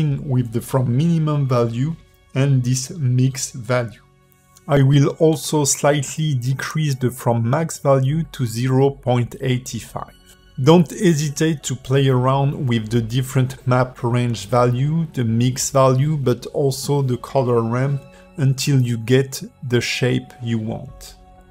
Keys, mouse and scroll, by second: 5.3 click, 7.0 click, 11.5 click, 14.3 click, 17.1 click, 19.1 shift+middle click, 20.0-20.5 scroll up 1, 20.5 click.